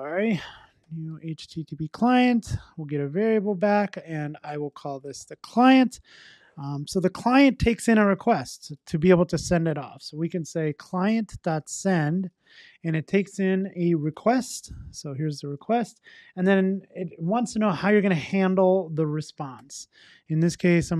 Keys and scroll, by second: 12.3 Return.